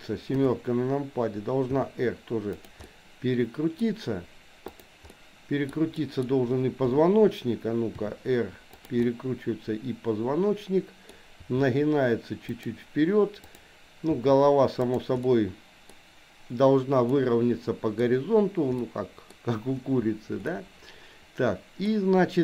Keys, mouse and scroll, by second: 0.2 KP_7, 1.9 r, 2.9 middle click, 3.7-5.0 scroll down 1, 5.1 middle click, 6.0 middle click, 6.9 KP_7, 8.0 r, 9.1-11.5 middle drag, 11.5 r, 13.4 click, 14.2 r, 15.2 middle click, 17.2 middle click, 18.7 middle click, 20.5-21.9 middle drag.